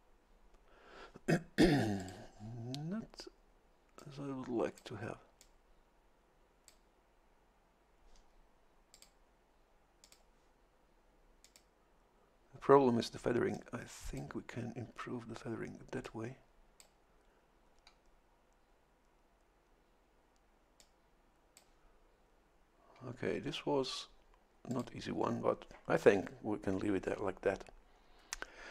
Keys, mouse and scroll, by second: 2.0 click, 4.0 click, 5.4-6.9 drag, 8.9 click, 10.0 click, 11.4 click, 13.5 click, 16.0-17.1 drag, 20.8-22.0 drag, 24.7 click, 26.1 scroll down 1.